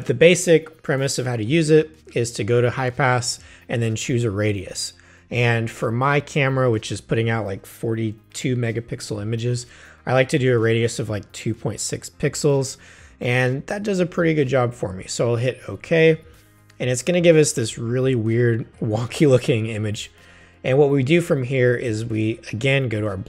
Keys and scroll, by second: 17.6 v.